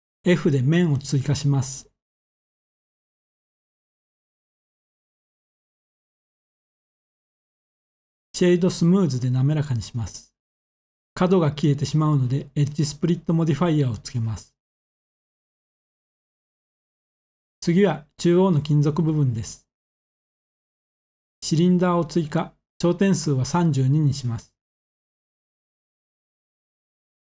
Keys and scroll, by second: 0.4 f, 4.8 Tab, 18.2 a, 23.2 typing, 26.4-27.1 typing.